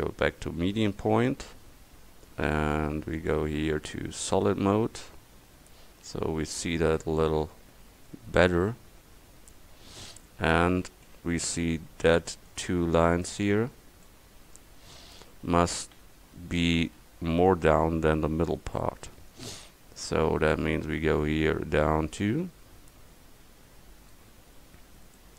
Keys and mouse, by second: 5.4 Tab, 5.9 Tab, 11.5 a, 12.0 c, 13.3-14.9 drag, 16.0 a, 17.3 c, 21.1-23.4 middle drag.